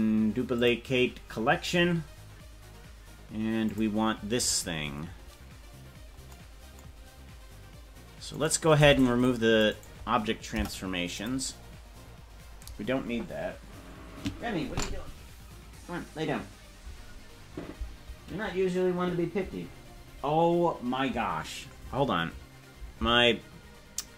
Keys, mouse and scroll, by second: 3.6 click, 5.9-6.3 scroll up 2, 8.3 right click, 8.8 c.